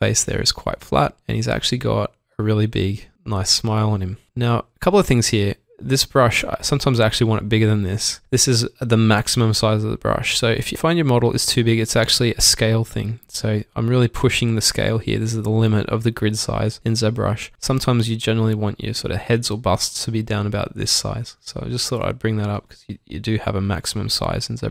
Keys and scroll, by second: 1.5 s, 3.8 s, 6.4 s, 8.7 typing, 22.6 typing.